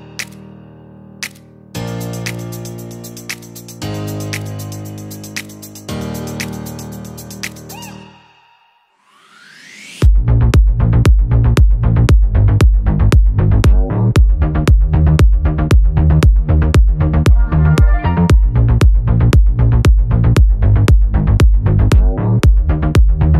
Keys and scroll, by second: 13.3 Return.